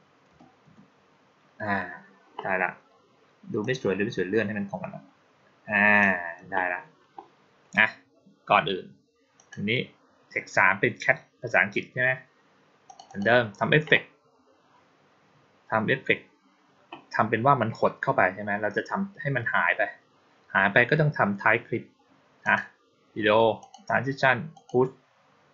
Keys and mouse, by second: 3.5-5.9 drag, 9.2 click, 12.7 click, 12.9 click, 22.3 click, 23.5 click, 24.4 click.